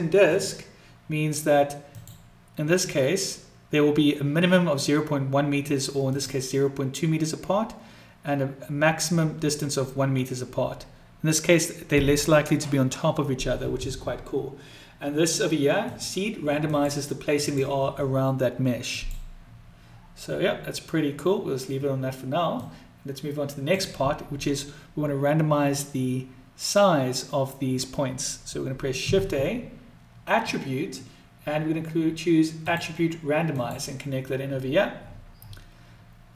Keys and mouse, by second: 1.9 click, 6.0 click, 15.7 click, 16.5 click, 17.3 click, 18.8 click, 22.5-23.7 drag.